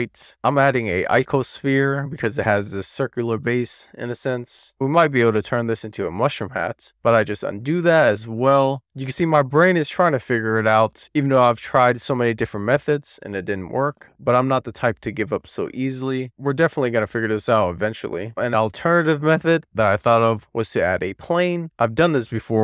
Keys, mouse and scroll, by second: 1.0-6.8 middle drag, 6.8-7.5 scroll up 1, 7.6 super+z, 8.5 alt+middle click, 8.8 super+z, 18.2 shift+q, 19.4 shift+a, 22.3-22.6 scroll down 2.